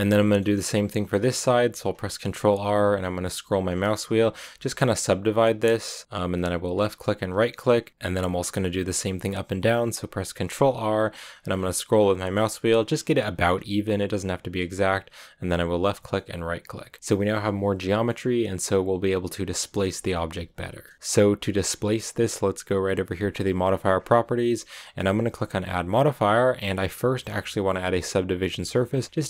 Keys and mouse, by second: 1.8 ctrl+r, 6.9 click, 10.2 ctrl+r, 15.6 click, 16.9 middle click, 17.0 Tab, 17.0-19.6 drag, 20.0 Tab, 23.3 click, 25.9-29.2 drag.